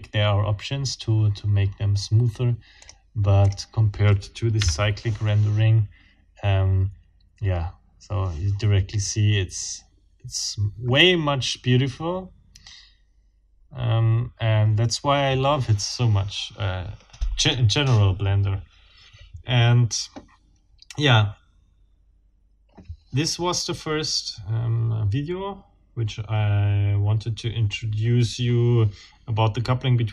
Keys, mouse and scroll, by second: 2.8 scroll up 2, 3.5 scroll up 2, 4.6 F12, 4.7 F12.